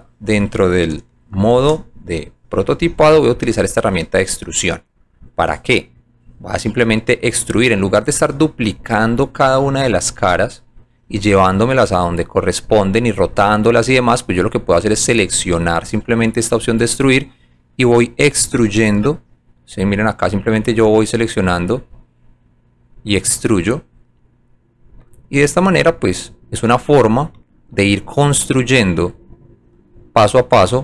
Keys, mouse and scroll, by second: 2.1 shift+click, 3.4 shift+click, 5.1 click, 6.3 click, 9.1 alt+right click, 10.1 alt+click, 11.2 alt+middle click, 12.0 alt+right click, 12.6 alt+click, 13.3 alt+middle click, 14.8 alt+click, 15.2 alt+click, 15.8 alt+middle click, 17.6 alt+click, 19.0 click, 20.0 click, 20.8 click, 21.6 click, 22.4 click, 23.0-24.0 drag, 25.1 alt+click, 25.9 alt+middle click, 26.7 alt+right click, 29.1-30.8 drag.